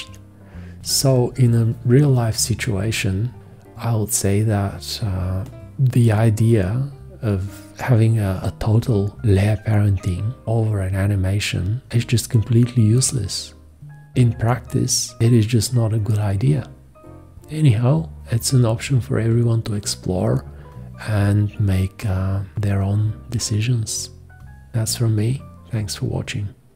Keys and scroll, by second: 0.7 space.